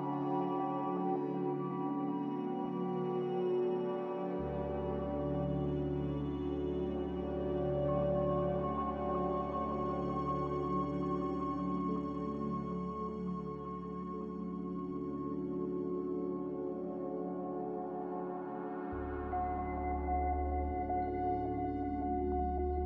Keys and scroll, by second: 7.7 z, 11.0 x.